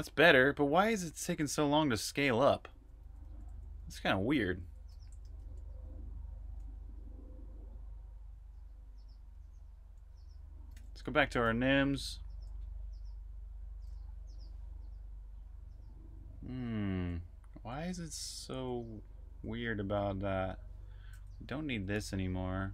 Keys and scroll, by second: 0.0-4.7 typing, 5.0 super+q, 5.9-6.6 typing, 10.6 super+j, 10.7 super+j, 11.2 super+k, 11.9 super+k, 12.5 super+k, 13.6-14.5 typing, 15.7-17.7 typing, 21.3-22.7 typing.